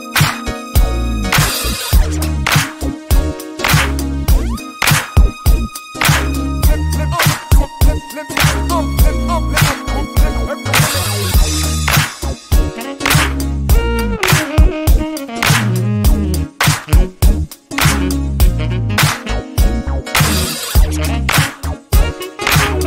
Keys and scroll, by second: 17.2 shift+a.